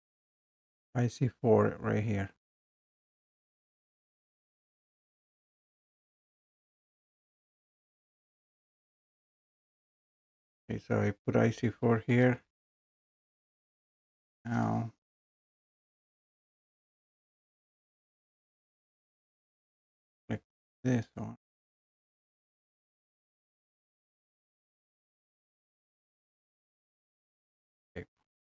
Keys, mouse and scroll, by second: 0.3 click, 2.9 click, 3.1 click, 4.0 click, 4.8 click, 6.1 click, 7.4 click, 7.6 click, 9.5 click, 12.1 4, 13.4 click, 17.2 click, 18.4 click, 21.1 click, 23.7 click, 27.0 click.